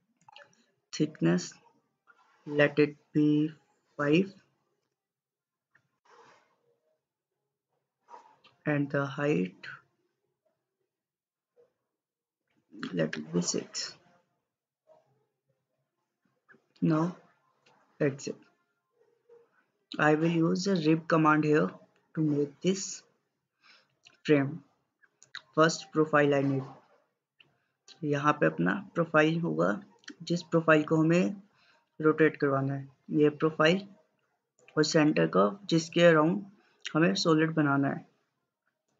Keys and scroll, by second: 4.0 typing, 4.9 Return, 12.1-13.4 typing.